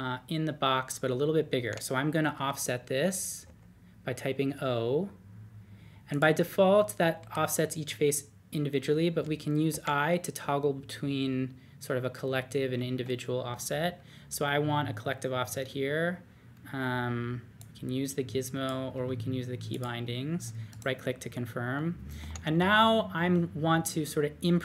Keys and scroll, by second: 3.4 o, 9.5-11.1 typing, 12.3-12.8 typing, 18.9 typing.